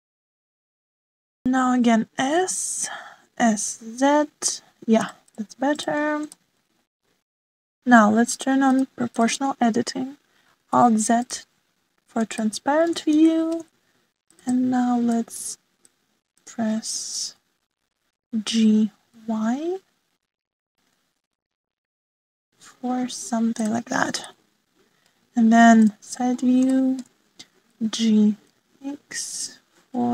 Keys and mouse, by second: 0.8 shift+middle click, 2.4 a, 2.7 s, 4.4 s, 7.3 shift+middle click, 9.6 click, 10.1 click, 11.7 alt+z, 13.3 shift+click, 14.3 shift+middle click, 15.6 click, 17.0 click, 18.2 g, 25.3 middle click, 27.7 shift+middle click, 28.6 g.